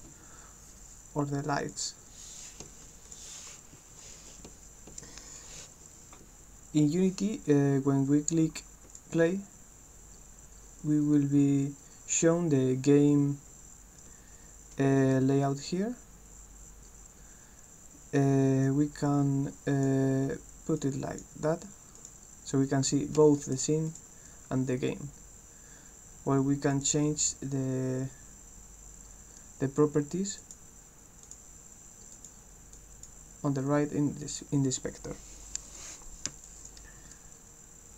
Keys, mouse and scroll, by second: 1.7 click, 3.1 click, 8.9 click, 18.7-19.8 drag, 20.8 click, 22.1 click, 23.3 right click, 23.9 click, 26.7 click, 30.4 click, 31.2 click, 32.1 click, 32.8 click, 36.5 click.